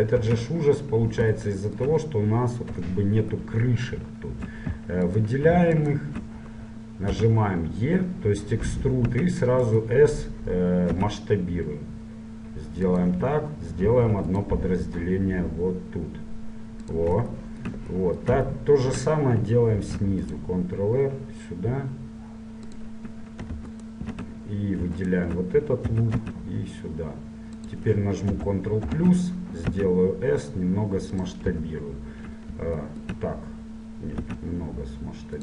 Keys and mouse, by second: 0.4 Tab, 2.9 KP_Divide, 5.2-8.9 middle drag, 7.3 e, 11.1 s, 14.0 ctrl+r, 17.7-23.3 drag, 20.0 ctrl+r, 23.9-27.0 right drag, 26.1 e, 28.5 ctrl+KP_Add, 29.9 s, 31.6 KP_1, 34.4 s.